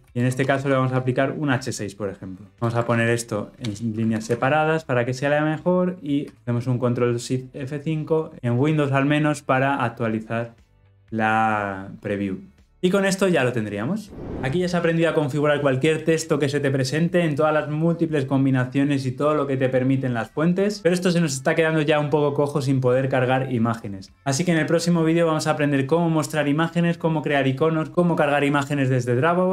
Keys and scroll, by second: 4.0 alt+Return, 4.2 ctrl+alt+o.